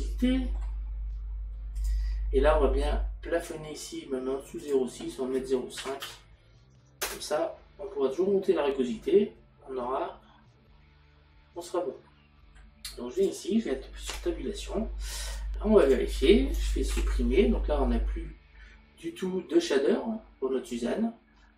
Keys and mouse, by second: 0.0 middle click, 1.8 click, 4.6 click, 5.9 KP_Decimal, 12.1 middle click, 13.2 click, 17.0 Delete.